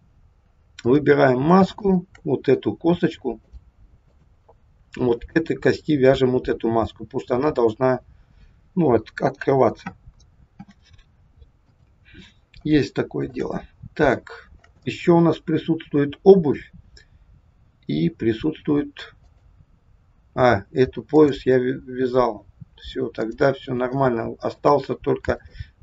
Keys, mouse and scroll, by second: 0.9 click, 1.7 shift+click, 1.8 shift+click, 3.4 click, 5.1 click, 10.5 ctrl+p, 12.4-12.7 scroll down 1, 12.9 shift+middle click, 13.6-14.1 scroll down 2, 14.1 shift+middle click, 14.9 middle click, 18.0-19.1 scroll up 2, 19.1 click, 21.1 click, 24.0 shift+middle click, 25.4 click.